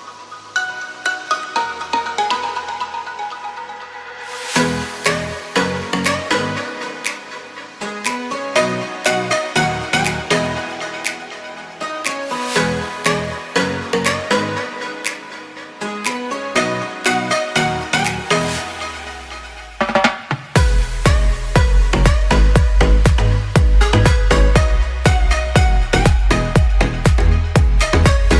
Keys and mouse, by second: 2.4-3.5 drag, 3.5 s, 7.2 shift+middle click, 9.2 s, 10.8 click, 11.3-12.7 shift+middle drag, 14.5 shift+middle click, 15.6 n, 16.5 shift+middle click, 17.0 Tab, 17.8 Tab, 18.0 shift+middle click, 18.5 a, 18.9 ctrl+s, 19.5 shift+middle click, 21.9 shift+middle click, 22.6-24.3 shift+middle drag, 24.5-25.8 shift+middle drag, 25.9-27.1 shift+middle drag, 27.5 shift+middle click.